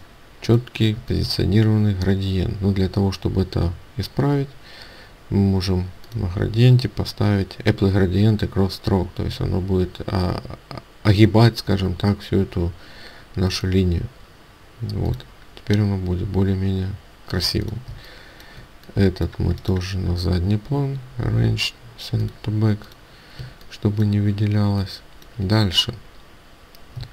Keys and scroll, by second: 17.8 ctrl+alt+space.